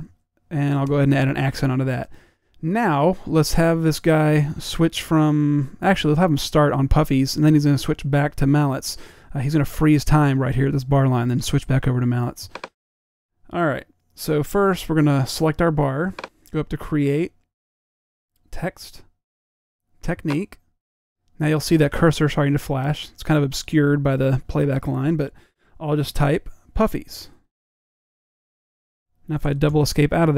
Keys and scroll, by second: 0.2 -, 0.9 =, 26.9-28.6 typing, 29.8-30.3 typing.